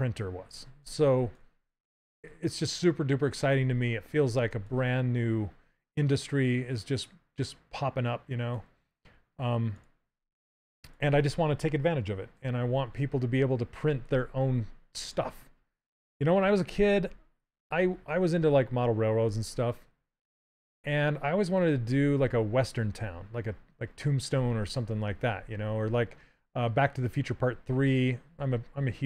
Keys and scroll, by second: 10.7 s, 13.8 s, 20.5 s, 24.3 s.